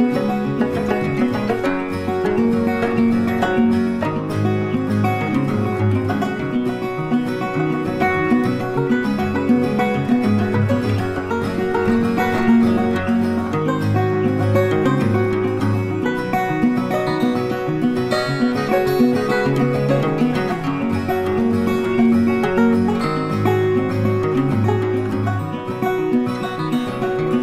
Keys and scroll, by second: 0.0 BackSpace.